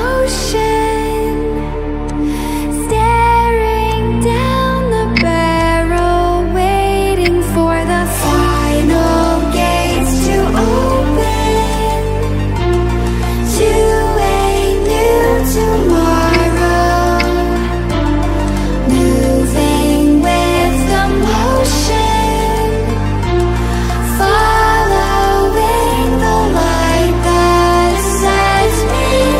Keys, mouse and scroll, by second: 0.3-2.2 drag, 3.8-4.4 drag, 5.1 v, 5.5-6.5 drag, 7.2 ctrl+g, 9.4 click, 11.6-14.2 alt+drag, 16.3 ctrl+c, 16.6 ctrl+f, 18.4-23.4 alt+drag, 24.3-26.2 shift+drag, 27.2 right click, 28.8 click.